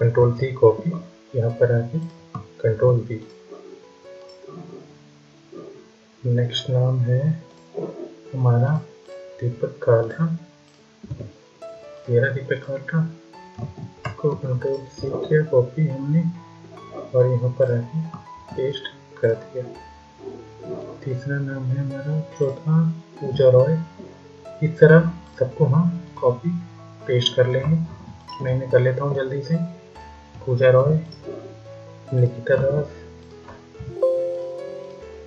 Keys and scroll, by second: 2.6 ctrl+v, 13.5 ctrl+a, 14.1 ctrl+c, 18.2 ctrl+v, 27.3 ctrl+c, 30.5 ctrl+v.